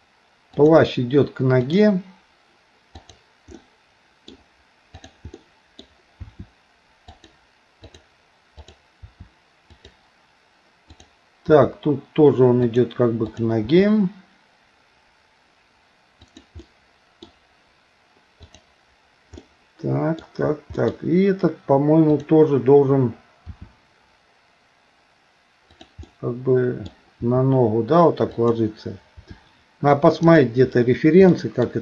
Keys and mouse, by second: 1.6 click, 3.0 click, 3.6 middle click, 5.0 click, 5.4 middle click, 6.3 r, 7.9 click, 9.0 r, 11.0 click, 13.3 click, 13.7 r, 16.6 middle click, 18.5 click, 19.5 middle click, 20.8 middle click, 22.2 click, 23.5 r, 26.1 middle click, 27.2 r, 29.2 r, 31.3 middle click.